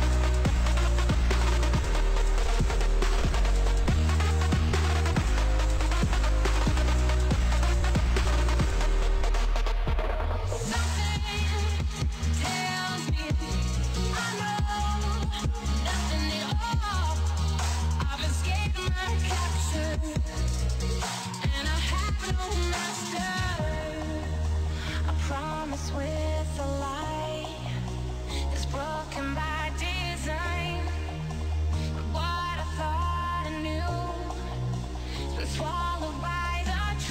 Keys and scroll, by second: 3.9 Delete, 5.4 ctrl+space, 6.3 c, 6.6 space, 7.1 s, 7.8 h, 20.4 space.